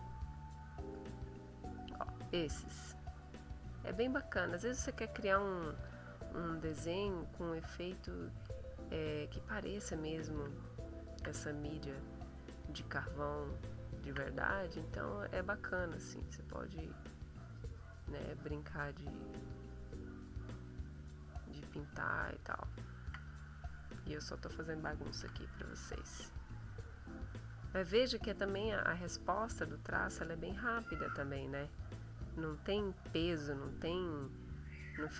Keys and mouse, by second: 0.6 click, 1.3 click, 2.5-3.6 drag, 5.8 click, 6.6 click, 7.1 click, 8.3 click, 9.3 click, 10.7 shift+click, 11.5 shift+click, 13.1-14.3 shift+drag, 14.3-17.1 shift+drag, 17.3-22.5 drag, 22.7-24.1 shift+drag, 25.1 e, 25.6-29.7 drag, 30.5-33.8 drag, 34.6 click.